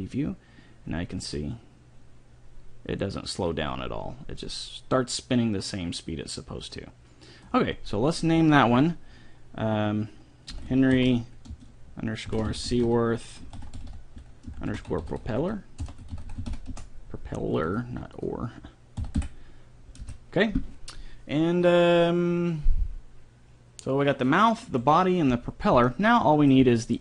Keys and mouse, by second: 1.4-3.4 drag, 8.3-10.3 drag, 15.6 p, 16.4 l, 17.8-19.4 drag, 26.0-27.0 middle drag.